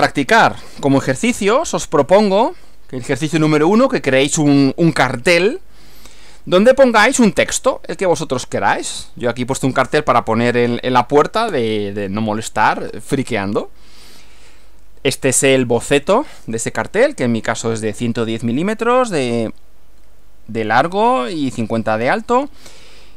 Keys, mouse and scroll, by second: 1.2 click, 14.1 Right.